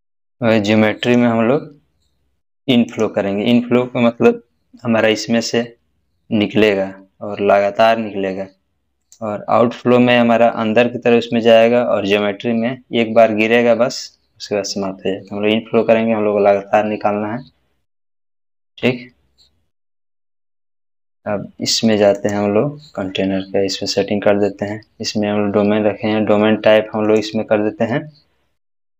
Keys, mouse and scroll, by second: 1.1 click, 9.0 click, 9.1 click, 19.3 click, 19.3-20.8 scroll down 1, 22.1 click, 27.0 click, 27.1 click.